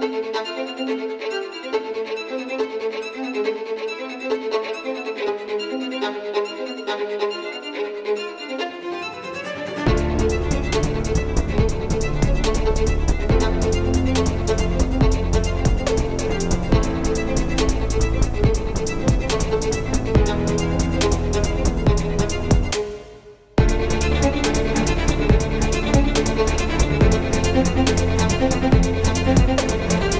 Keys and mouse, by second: 0.4 s, 1.8 n, 4.4 n, 5.7 shift+d, 6.7 s, 8.2 s, 13.7 KP_1, 14.3 z, 16.9 KP_3, 18.3 shift+d, 19.4 ctrl+z, 20.2 shift+d, 21.8-22.3 drag, 24.0 shift+d.